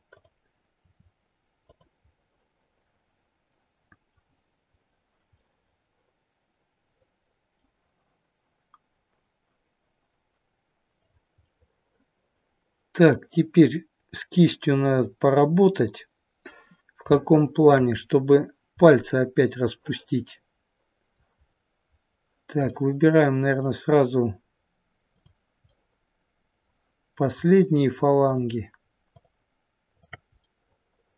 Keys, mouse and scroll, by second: 0.7 r, 1.9 middle click, 3.0 middle click, 10.9 click, 11.4 middle click, 15.1 scroll up 2, 17.1 shift+middle click, 17.9-18.9 scroll up 1, 18.9 middle click, 18.9-20.0 scroll up 1, 21.4-21.9 scroll up 2, 21.9-22.7 scroll down 1, 22.7 middle click, 25.7 click, 28.2 shift+click, 30.5 middle click.